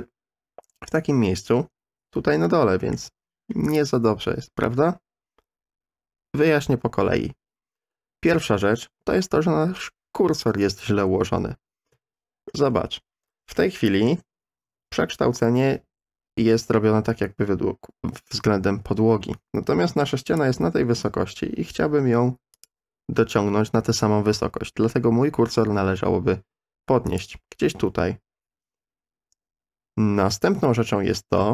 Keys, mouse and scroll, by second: 2.5 shift+middle click, 8.3 ctrl+z, 11.0 KP_3, 11.9 KP_1, 13.5 shift+click, 13.6 shift+middle click, 13.9 shift+click, 20.3 click, 22.5 click, 27.1 click.